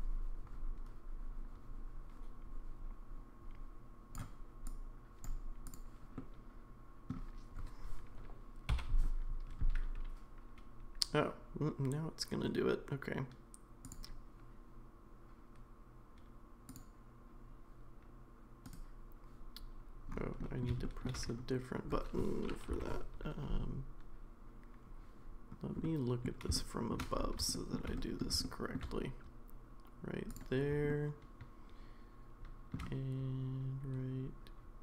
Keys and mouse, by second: 4.7 click, 5.7 click, 6.2 middle click, 20.4 middle click, 25.8-34.8 middle drag.